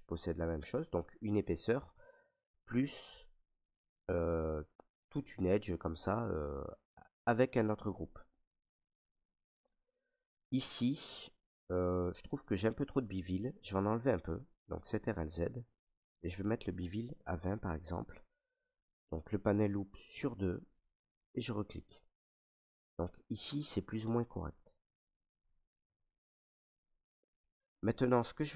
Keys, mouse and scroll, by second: 6.7 right click, 7.8 ctrl+right click, 9.3 right click, 10.0 ctrl+right click, 14.8 ctrl+z, 16.2 click, 17.1 typing, 17.6-19.8 Tab, 21.2 click, 23.0 ctrl+right click, 23.8 right click, 25.0 alt+right click, 25.6 ctrl+right click, 26.2 alt+right click, 27.5 right click.